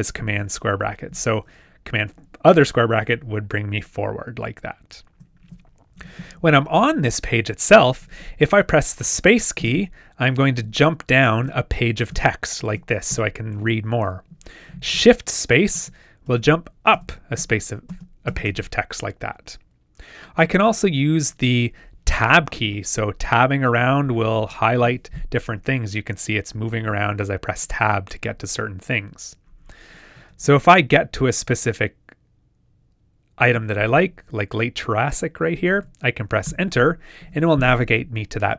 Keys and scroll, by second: 3.0 super+], 15.7 shift+space, 30.1 shift+Tab.